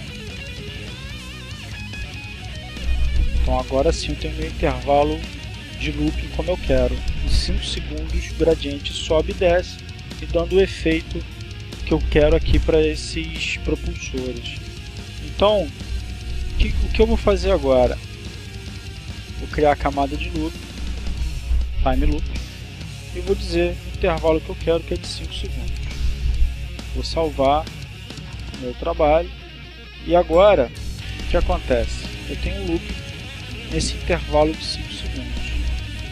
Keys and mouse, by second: 1.0-6.3 drag, 18.1 right click, 21.1 click, 22.9-23.9 drag, 24.5 5, 24.9 s, 25.3 Return, 27.1 click, 28.3 click, 30.5 click, 31.6 click.